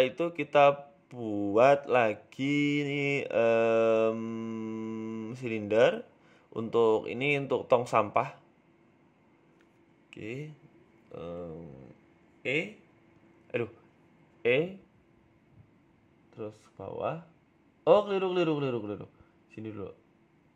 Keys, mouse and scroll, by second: 0.4 middle click, 3.6 middle click, 4.6 KP_1, 5.1 shift+middle click, 5.3 shift+a, 6.9-7.3 scroll up 2, 7.8 s, 9.0 g, 9.7 s, 10.6 shift+middle click, 10.8 middle click, 11.3-11.7 scroll up 3, 11.7 shift+middle click, 12.4 Tab, 12.7 scroll up 1, 13.1 right click, 14.6 s, 15.4 s, 15.4 e, 17.8 g, 20.1 s.